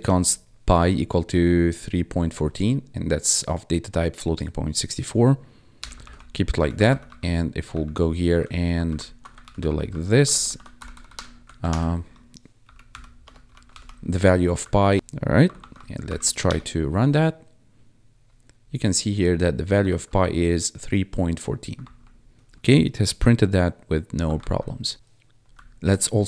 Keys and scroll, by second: 0.0 Tab, 5.7 ;, 6.0 ctrl+s, 6.5 Up, 8.8 alt+shift+Down, 9.4 ctrl+s, 9.6 Up, 9.8 Down, 10.2 ctrl+Right, 10.7 ctrl+Left, 11.5 shift+Right, 12.6 shift+p, 12.8 shift+o, 13.2 shift+BackSpace, 13.4 shift+i, 13.6 ctrl+s, 14.5 Down, 14.7 Left, 14.9 Escape, 15.5 ctrl+`, 16.0 Up, 16.4 Return, 20.4 1, 22.3 1, 24.3 ctrl+F1, 25.5 Down.